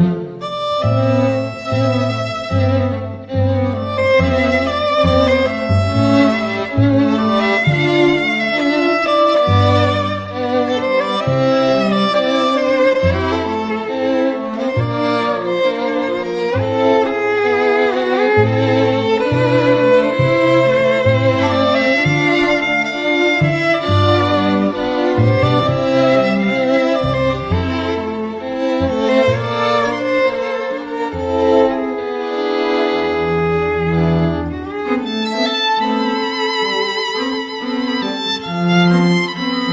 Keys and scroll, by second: 14.6 [, 14.8 [.